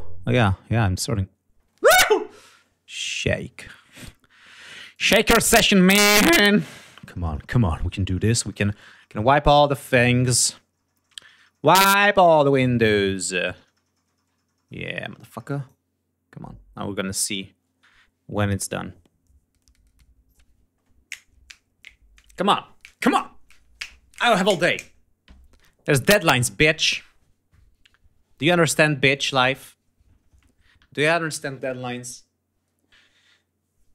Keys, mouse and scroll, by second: 4.9-6.1 drag, 6.1 scroll down 2, 9.2 scroll down 2, 14.9 scroll down 2.